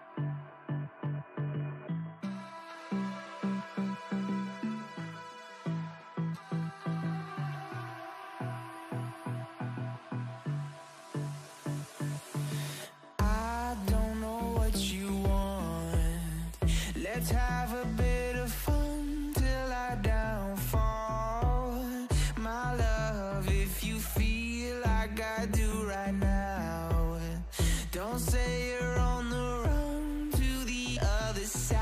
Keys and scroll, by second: 2.1 ctrl+l, 2.8 Return, 2.9 Return, 3.0 Return, 3.2 Return.